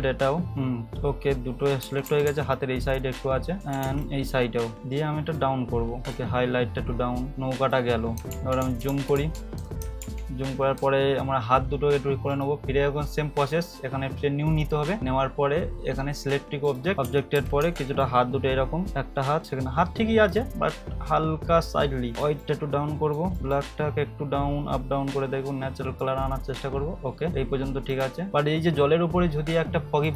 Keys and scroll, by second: 1.8 [, 2.0 [, 2.2 [, 3.8 [, 8.3 ctrl+=, 8.6 ctrl+=, 8.9 ctrl+=, 10.0 -, 16.9 ], 17.0 ], 17.3 ], 17.6 [, 28.3 ctrl+=.